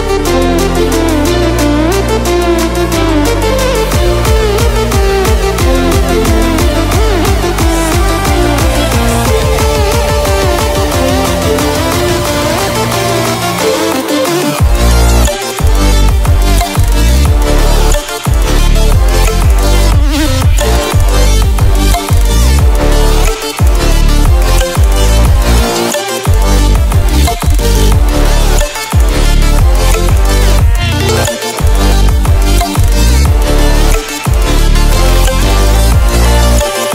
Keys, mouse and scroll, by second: 0.1 alt+click, 2.1 ctrl+alt+scroll down 1, 2.8 ctrl+alt+scroll up 1, 3.2 ctrl+alt+scroll down 1, 3.7 ctrl+alt+scroll up 1, 5.0 click, 6.3 scroll down 1, 7.8-14.1 drag, 22.6 ctrl+alt+scroll up 1, 23.7 click, 24.6 ctrl+alt+scroll down 1, 25.6 click, 34.8 ctrl+alt+scroll down 1, 35.9 ctrl+alt+scroll up 1.